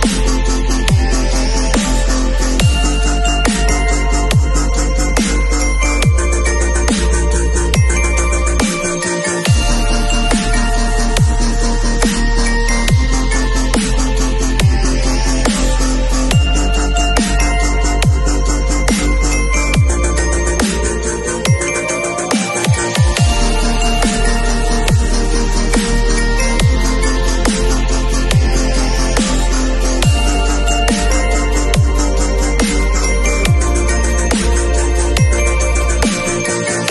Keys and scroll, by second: 31.7 super+u.